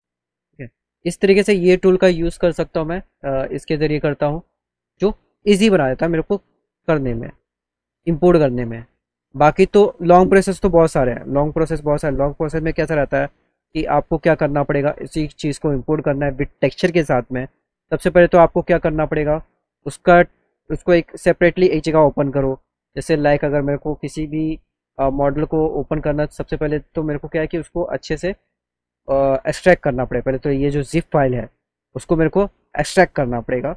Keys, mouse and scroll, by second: 2.6 click, 3.3 click, 11.5 click, 12.5 click, 13.4 click, 14.6 click, 15.3 click, 16.7 click, 17.7 click, 20.3 click, 22.2 click, 23.6 scroll up 1, 24.8 click, 26.8 scroll up 1, 27.6 click, 28.6 click, 30.6 click, 32.6 click, 32.9 click.